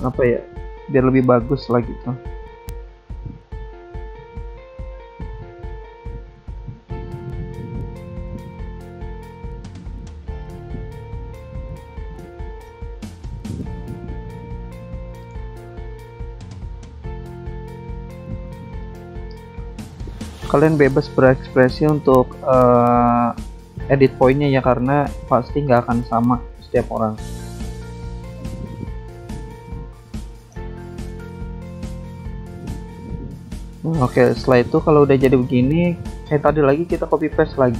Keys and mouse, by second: 1.2 ctrl+z, 1.9 click, 3.6 click, 5.4 click, 6.9 click, 8.2 click, 9.5 click, 10.7 click, 12.2 click, 14.1 click, 15.3 click, 17.9 click, 19.4 click, 21.8 click, 23.1 click, 24.2 click, 26.2 click, 27.4 click, 31.1 click, 33.2 click, 33.6 click, 35.7 click, 37.5 click.